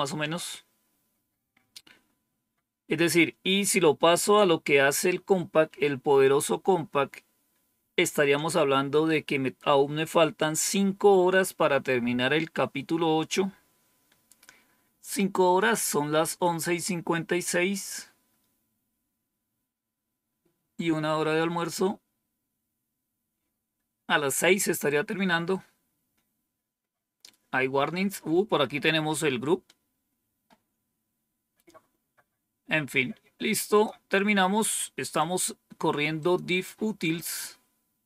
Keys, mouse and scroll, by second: 33.6 click, 35.1 click, 36.1 click, 37.1 click.